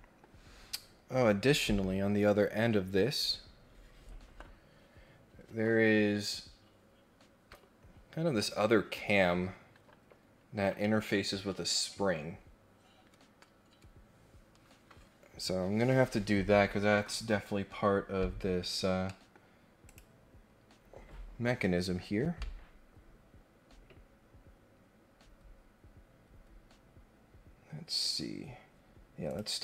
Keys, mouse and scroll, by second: 17.9-18.2 scroll down 2, 18.3-18.9 scroll up 3, 19.0 middle click, 19.8 click, 28.3 scroll down 2, 28.6 scroll up 2, 29.2 click.